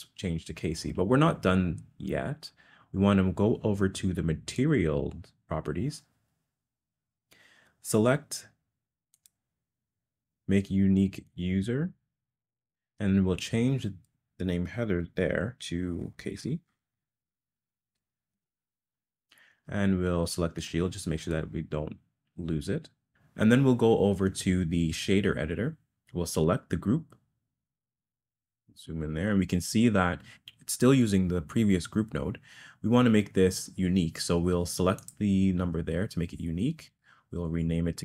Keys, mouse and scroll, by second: 9.2 click, 11.4-18.4 drag, 20.6 click, 26.3 click, 28.9 middle click, 35.0 click, 36.9-38.0 drag.